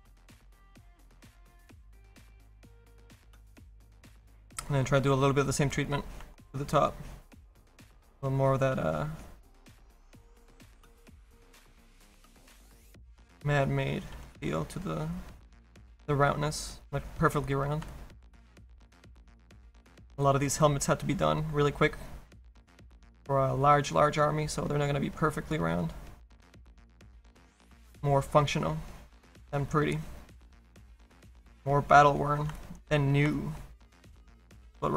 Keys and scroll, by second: 1.5 s, 7.4 s.